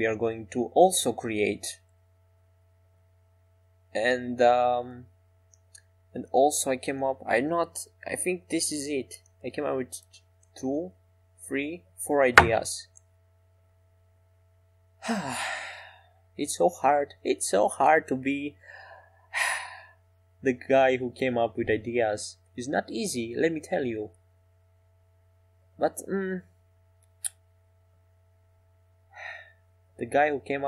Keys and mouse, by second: 3.7 e, 6.5 s, 9.6 ctrl+z, 14.0 e, 22.4 s.